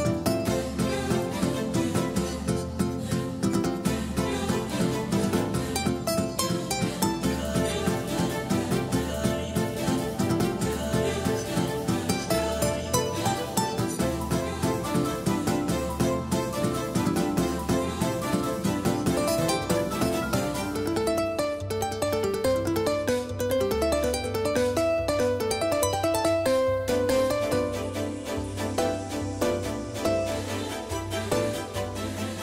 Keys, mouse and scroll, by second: 3.8-6.0 drag, 6.6 ctrl+z, 8.6 s, 14.1 Tab, 15.1 s, 17.8-19.5 drag, 26.8 KP_1, 28.9-31.2 drag, 32.3 KP_3.